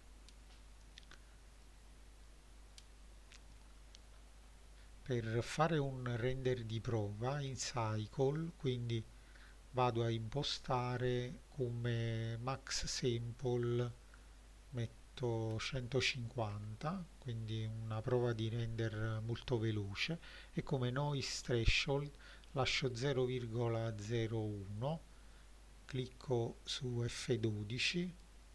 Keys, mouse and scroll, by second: 3.6-5.5 scroll up 7, 5.5 click, 12.6-16.7 drag, 24.8 click.